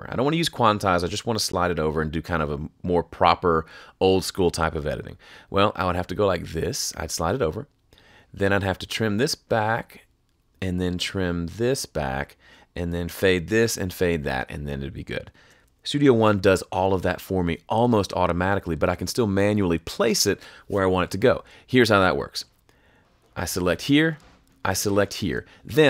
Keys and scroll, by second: 17.1 super+z.